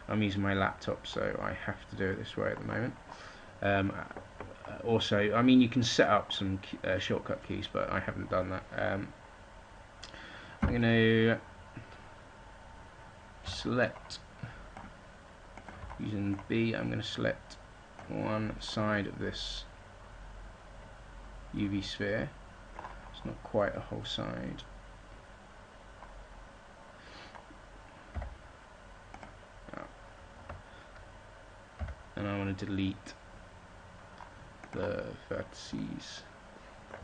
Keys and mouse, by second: 1.2-3.9 middle drag, 10.5 z, 13.3 b, 15.7 b, 28.0 x, 30.4 ctrl+z, 33.1 x.